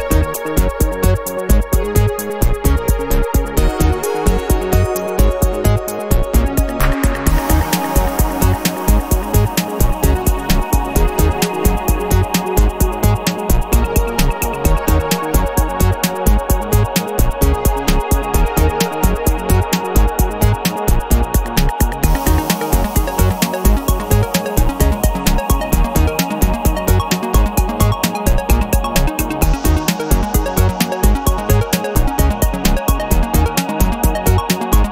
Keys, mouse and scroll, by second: 0.4 BackSpace, 0.8 2, 1.6 0, 3.1-3.9 scroll down 4, 4.4 click, 4.9-5.2 scroll down 1, 5.7 scroll up 1, 6.2 scroll down 1, 8.2 click, 10.5 click, 11.2-12.2 typing, 12.8 click, 13.3 2, 13.6 0, 14.8 click, 15.4-16.4 typing, 17.1 click, 18.1 click, 19.0 click, 19.6-20.5 typing, 21.2 click, 21.8-22.7 typing, 23.3 click, 24.0-24.9 typing, 25.6 click, 27.7 click, 28.3 click, 29.5-32.5 drag, 33.1-34.9 drag.